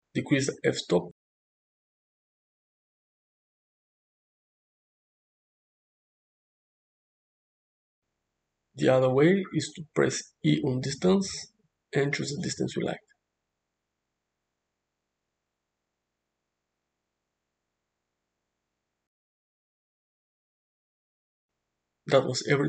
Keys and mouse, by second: 0.4 click, 2.8-5.2 drag, 6.6 click, 12.3 e, 18.6 click, 20.7 click.